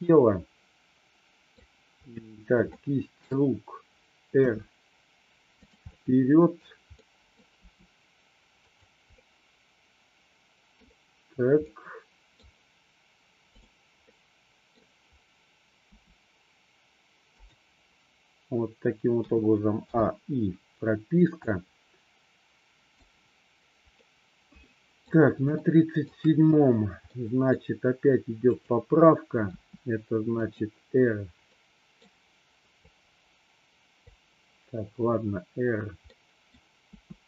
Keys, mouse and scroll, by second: 2.8-3.4 shift+middle drag, 4.6 r, 5.9-6.7 middle drag, 7.1 middle click, 7.7 r, 8.7 click, 9.3-10.9 middle drag, 11.8-12.4 middle drag, 14.2-14.8 middle drag, 15.9 r, 19.3 a, 19.9 i, 21.6-23.1 drag, 24.1-25.2 middle drag, 25.7-26.2 shift+middle drag, 27.3 middle click, 28.7 click, 29.4 r, 30.4 click, 31.6-32.2 middle drag, 32.8-34.1 drag, 36.2-36.6 middle drag, 37.1 r.